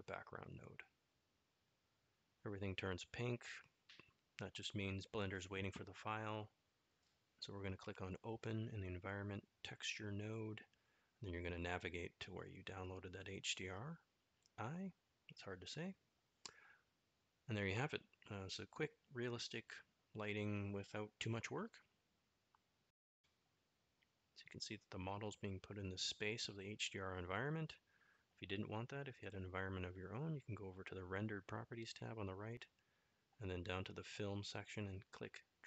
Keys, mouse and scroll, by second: 25.7-26.6 middle drag, 29.6-30.7 middle drag.